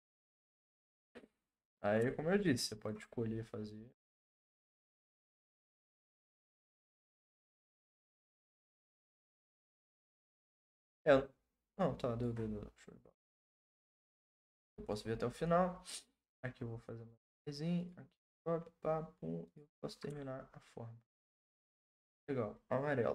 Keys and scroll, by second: 8.6 ctrl+z, 8.9 ctrl+z.